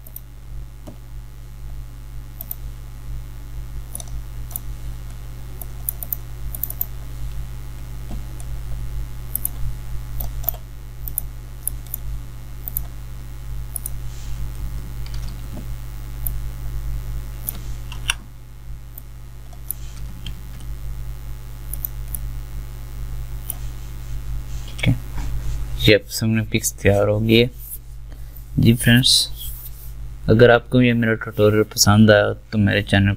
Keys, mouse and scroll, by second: 18.0 Return, 20.4 ctrl+z.